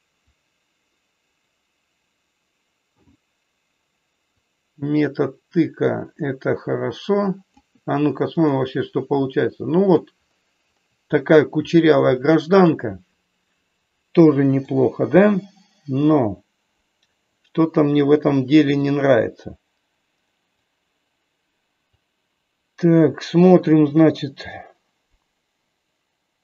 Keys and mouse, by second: 0.3-3.1 drag, 4.4-7.6 drag, 9.2 middle click, 12.2 middle click, 14.6 click, 17.3 click, 18.7-20.6 drag, 21.9-24.4 drag.